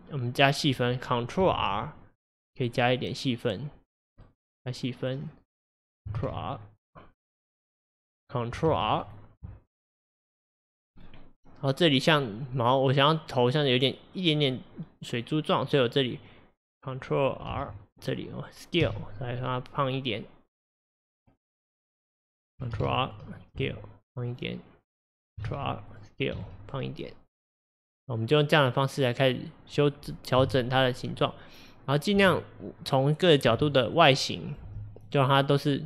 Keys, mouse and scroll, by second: 1.6 ctrl+r, 5.3 click, 6.2 ctrl+r, 7.8 click, 8.7 ctrl+r, 10.2 click, 11.0-14.1 scroll up 1, 15.8 click, 17.6 ctrl+r, 21.7 click, 22.8 ctrl+r, 25.6 ctrl+r, 29.4 click, 30.4 g, 31.9 click, 32.2 g, 33.4 click, 33.6 g, 34.5 click, 34.7 g.